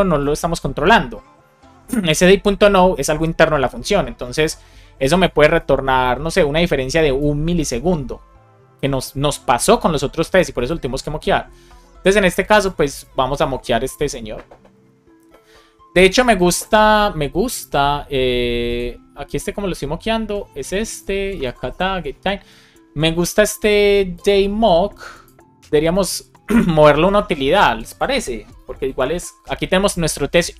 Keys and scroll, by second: 28.8 shift+super+e.